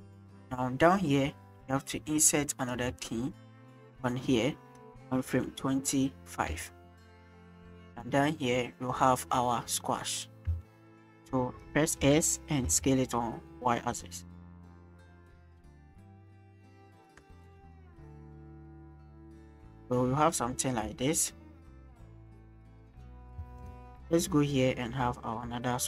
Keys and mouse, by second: 3.0 shift+drag, 3.9 click, 7.5-10.2 drag, 10.6 shift+click, 11.9 s, 12.6 y, 15.6-17.5 drag, 17.5 space, 18.7 click, 19.4 click, 21.2 click, 23.4 space, 23.6 middle click, 24.1-25.8 drag.